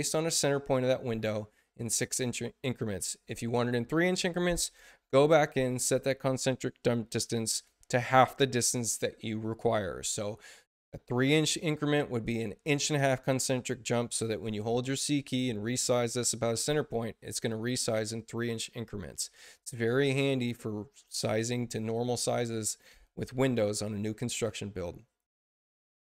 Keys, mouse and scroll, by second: 14.4 c, 15.0-19.5 drag.